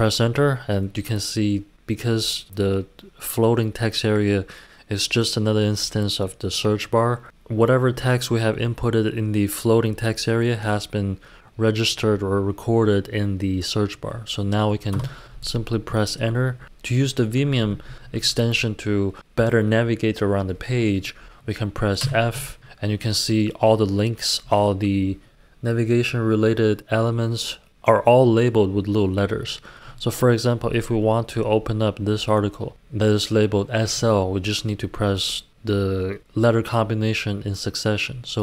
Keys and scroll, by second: 14.9 Return, 16.6-17.8 typing, 22.0 typing.